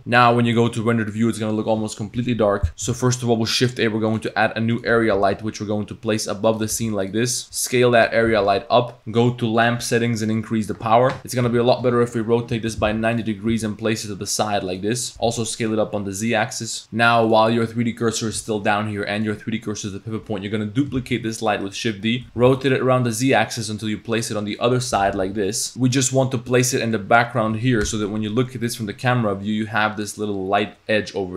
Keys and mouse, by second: 3.1 shift+a, 5.2 g, 6.8 shift+s, 7.4 s, 8.3 g, 10.4 click, 11.2 r, 11.5 r, 13.5 g, 15.1 s, 16.8 click, 19.2-19.8 drag, 21.0 shift+d, 22.2 ctrl+z, 22.4 r, 25.0 g, 26.7-27.0 drag, 27.9 KP_0.